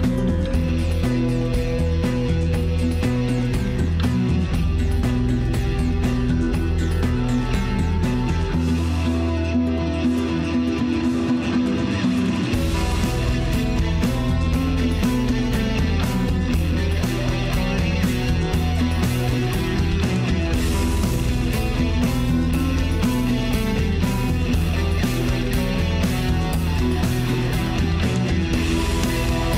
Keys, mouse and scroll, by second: 0.1 click, 1.1 click, 4.0-5.4 drag, 5.4 f, 5.9 f, 6.9-7.5 scroll down 2, 7.5-9.1 middle drag, 9.1-9.5 scroll up 1, 9.5-12.3 shift+middle drag, 12.3 Tab, 14.2-14.6 drag, 17.2 click, 18.1 click, 19.1 scroll up 1, 20.2 Tab, 20.5-20.9 scroll down 1, 20.9-24.5 middle drag, 25.3-27.6 drag, 29.2-29.5 drag.